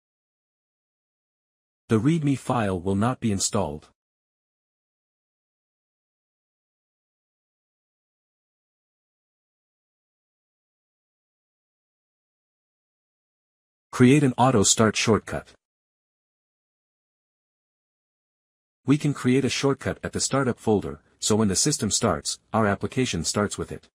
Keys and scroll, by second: 17.6 Return, 17.7-23.9 typing, 21.1 Return.